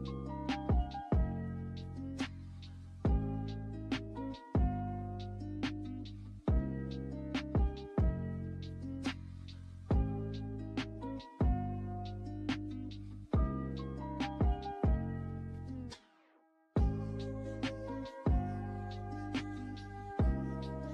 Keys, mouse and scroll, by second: 2.9-17.6 drag, 20.7 click.